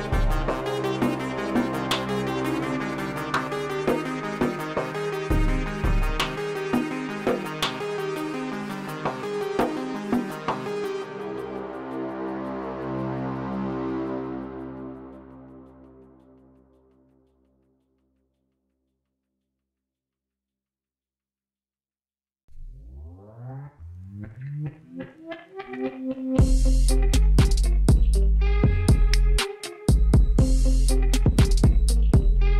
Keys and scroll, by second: 4.2 ctrl+z, 9.7 alt+a, 10.6 l, 15.0 alt+a, 15.6 l, 22.9 Tab, 26.8 Tab.